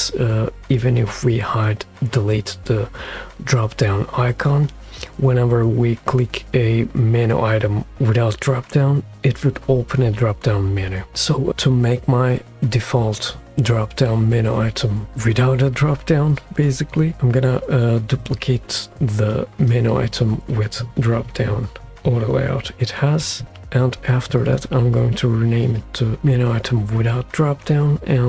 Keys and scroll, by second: 23.6 super+d, 26.2 Return, 26.2 typing.